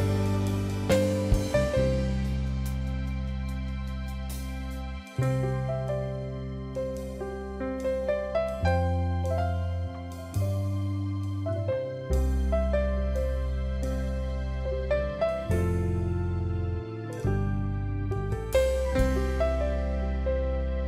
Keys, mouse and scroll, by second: 1.4 click, 14.3 ctrl+j, 15.7 right click, 18.3 Right, 18.3 ctrl+click.